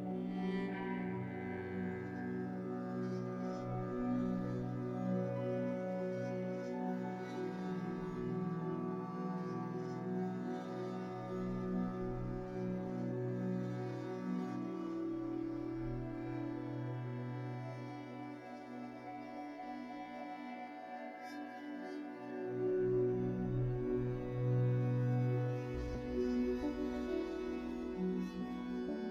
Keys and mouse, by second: 0.4 Tab, 0.8 Tab, 1.3-1.7 middle drag, 2.0-2.5 drag, 3.3-4.9 middle drag, 5.5-11.6 middle drag, 13.9 shift+middle click, 16.3-18.0 middle drag, 19.3 shift+middle click.